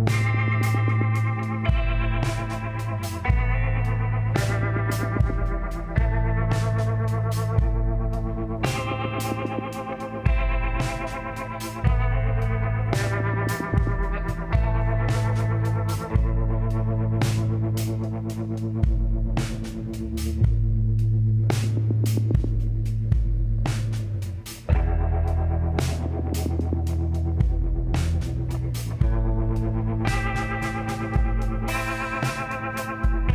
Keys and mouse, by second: 2.7 g, 3.7 middle click, 4.7-6.1 drag, 4.7 g, 6.1 middle click, 6.3 click, 7.3 click, 7.6 g, 9.4 g, 10.5 click, 13.0-15.6 drag, 15.6 w, 19.9-21.2 middle drag, 21.2-22.7 drag, 23.7-25.5 drag, 27.3-30.3 drag, 31.3-33.2 middle drag.